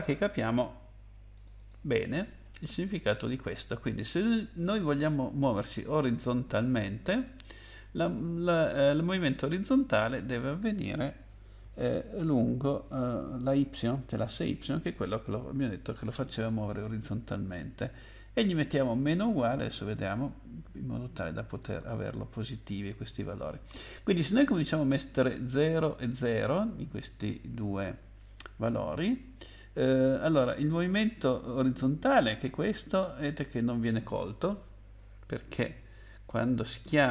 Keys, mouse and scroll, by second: 1.3 click, 1.5 click, 1.7 double click, 2.3-2.9 scroll down 4, 4.2 click, 21.6 click, 27.8 click, 35.6 scroll up 1.